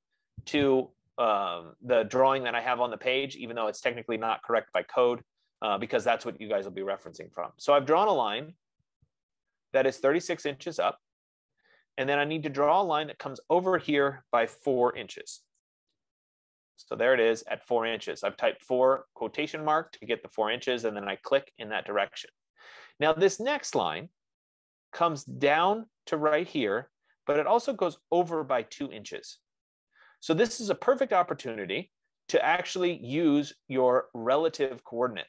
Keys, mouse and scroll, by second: 5.2-9.2 drag, 9.2 middle click, 9.6 middle click, 10.0 middle click, 15.7 shift+4, 16.0 Return, 20.4-25.3 drag, 31.4 F15.